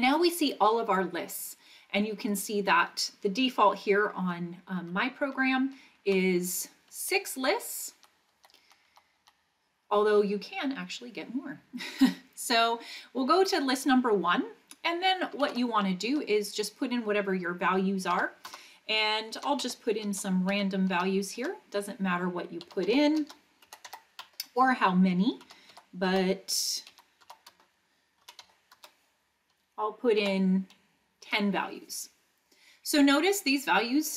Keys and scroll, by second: 4.2 Right, 4.8 Right, 5.2 Right, 5.6 Right, 6.0 Right, 7.0 Right, 7.9 Left, 8.4 Left, 8.6 Left, 8.9 Left, 9.2 Left, 15.4 2, 16.1 Return, 18.1 6, 18.4 Return, 19.1-20.9 typing, 21.3 Return, 22.4-24.3 typing, 25.4 2, 25.7 6, 26.1 Return, 26.9-28.8 typing, 27.5 Return, 30.1 2, 31.2 Return.